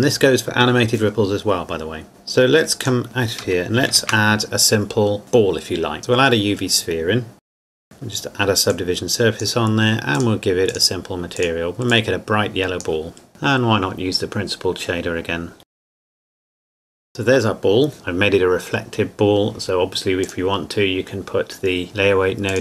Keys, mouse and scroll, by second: 2.8 click, 3.9 shift+a, 6.0 click, 7.4 g, 7.5 click, 7.6 KP_7, 7.7 click, 7.8 KP_0, 7.9 ctrl+2, 8.7 click, 15.6 click, 16.0 Delete, 16.1 click, 16.7 s, 16.9 scroll down 1, 17.9-20.2 scroll down 1, 20.2 click.